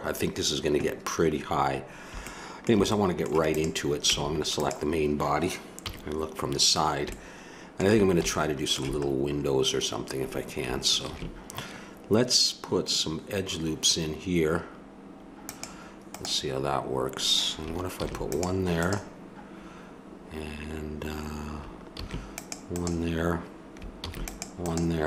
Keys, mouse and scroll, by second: 2.3-3.5 middle drag, 3.5-4.8 drag, 4.1 Tab, 5.8 KP_3, 10.0-11.1 middle drag, 11.1 ctrl+r, 18.0 ctrl+r, 21.9 ctrl+r, 24.0 ctrl+r.